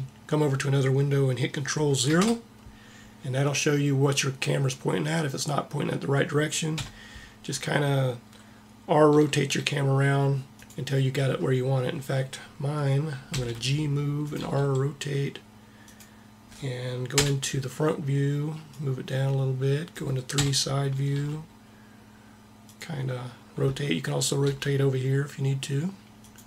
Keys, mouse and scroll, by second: 2.0 ctrl+KP_0, 6.6 KP_7, 9.2 r, 13.2 g, 14.4 r, 17.1 KP_1, 18.8 click, 20.4 KP_3, 21.0 r, 24.5 r.